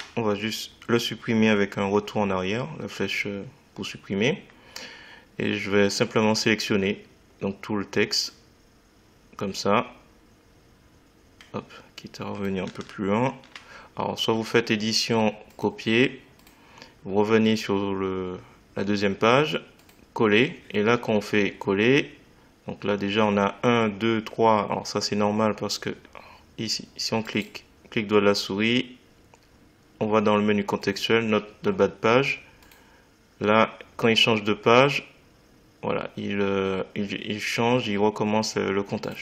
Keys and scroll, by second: 0.0 BackSpace.